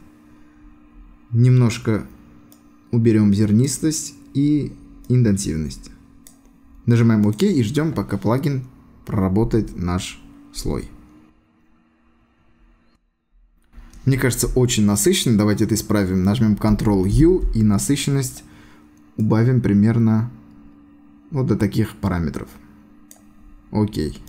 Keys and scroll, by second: 17.1 ctrl+u.